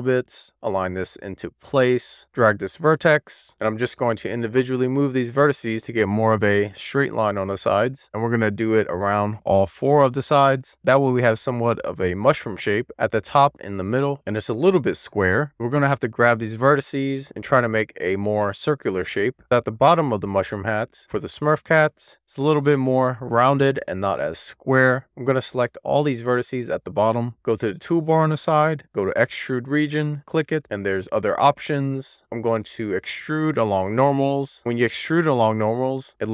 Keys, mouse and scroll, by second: 0.3 scroll up 1, 0.4 Tab, 0.6 e, 1.0 click, 1.4 w, 1.6 click, 2.1 middle click, 2.3 click, 2.7 middle click, 3.4 scroll up 2, 3.5 shift+click, 4.2 click, 4.4 click, 4.8 click, 5.3 middle click, 5.4 scroll down 2, 6.1 alt+middle click, 6.2-6.8 scroll up 3, 6.8 click, 7.6 click, 8.1 scroll down 2, 8.2 middle click, 8.5 scroll up 1, 8.7 alt+z, 8.8 alt+z, 9.2-9.5 scroll down 1, 9.5 middle click, 10.0 scroll up 3, 10.2 scroll down 2, 10.3 alt+middle click, 10.9 click, 11.9 alt+middle click, 12.1 alt+z, 12.3-12.9 click, 12.9 click, 13.3 scroll down 4, 13.5 alt+z, 13.6 shift+middle click, 13.9 scroll up 4, 14.1 middle click, 14.7 middle click, 15.1 middle click, 15.4 click, 15.7 middle click, 16.0 super+z, 16.1 middle click, 16.2-16.9 scroll up 4, 16.9 click, 17.2 click, 18.0 alt+middle click, 18.8 click, 19.0 alt+shift+click, 19.3 middle click, 20.3 middle click, 20.9 d, 21.7 click, 22.1 middle click, 22.4 super+z, 23.0 shift+middle click, 23.7-24.9 middle drag, 25.4 alt+middle click, 30.4-33.2 drag, 34.0-34.9 scroll up 2, 35.7 d.